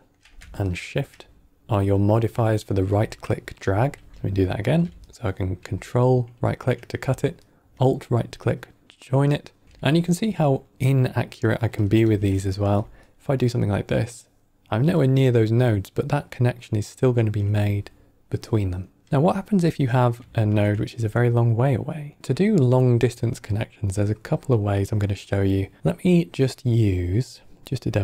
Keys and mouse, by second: 0.6 shift+right click, 3.5 ctrl+x, 4.1 ctrl+x, 4.1 click, 5.0 ctrl+right click, 7.3-9.6 alt+right drag, 10.5-11.0 middle drag, 11.7 click, 11.9 shift+d, 13.0-17.0 alt+right drag, 19.6 middle click, 20.2 shift+a.